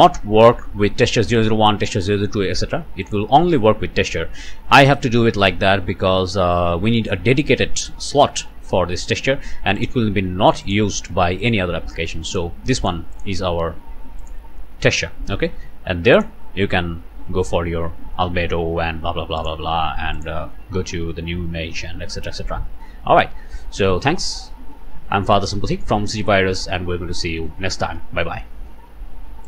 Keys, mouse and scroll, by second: 3.0 click, 4.2 scroll down 2, 8.9-9.2 scroll down 2, 9.8 click, 10.6 click, 12.3 click, 12.8 click, 13.1 click, 14.2 click, 16.1 click, 19.4 click, 20.2 click, 22.9 scroll up 1, 24.2 scroll up 1, 25.1 scroll up 1.